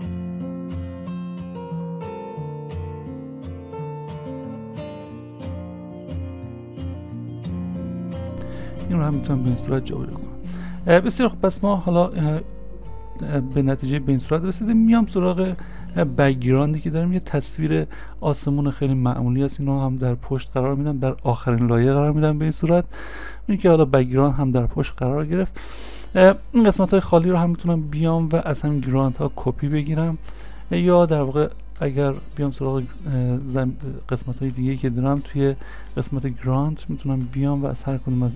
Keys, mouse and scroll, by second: 5.7 ctrl+d, 6.9 s, 14.4 s, 14.5 scroll down 1, 15.5-18.6 scroll up 1, 20.0 scroll up 1, 20.1 scroll down 1, 33.0-34.5 scroll down 1, 34.5 scroll down 1.